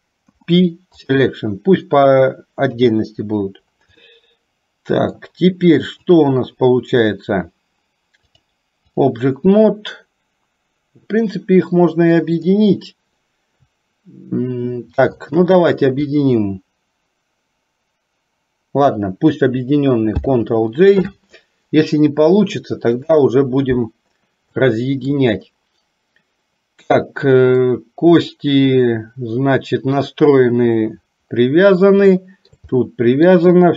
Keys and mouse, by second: 0.3 p, 2.8 KP_3, 4.0-5.2 middle drag, 6.2 click, 8.3 click, 20.2 ctrl+j, 24.5 shift+middle click, 27.7-30.1 middle drag, 32.2 shift+middle click, 32.9 middle click.